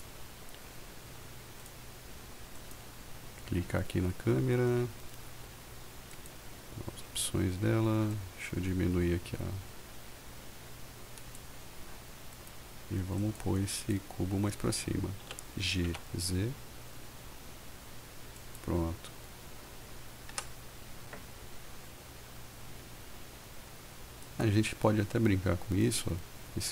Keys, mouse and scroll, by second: 0.0 click, 1.7 click, 2.8 click, 6.3 click, 8.3-11.5 drag, 12.5-13.5 right drag, 13.9 click, 15.5 g, 16.0 z, 18.5 click, 20.5 F5.